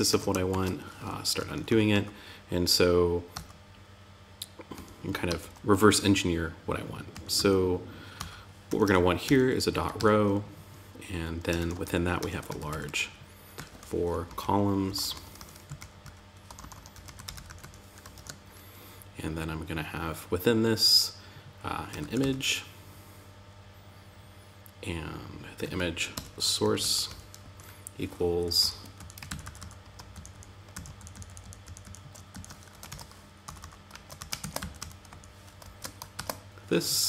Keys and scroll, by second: 0.7 Up, 4.1 Down, 4.6 super+Left, 6.5 Up, 6.7 Left, 7.5 Up, 8.0 Tab, 10.9 shift+., 17.5 shift+., 27.8 Down, 28.6 alt+Left, 29.5 alt+Right, 30.1 alt+Left, 30.3 alt+shift+Right, 31.6 shift+Right, 32.2 super+c, 32.8 Up, 33.7 super+Right, 33.9 Left, 34.4 Right, 35.5 super+v, 36.6 super+Right.